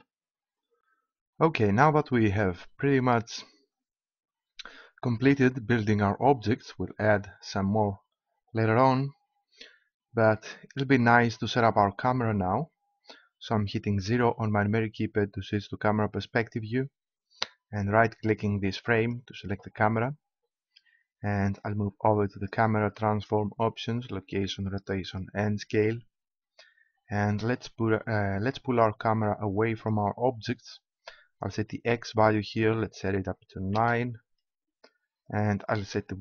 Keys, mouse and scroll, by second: 14.0 KP_0, 18.2 middle click, 19.0-21.3 right drag, 22.3-26.2 drag, 29.8-31.5 drag, 35.3 middle click, 35.5-36.2 drag.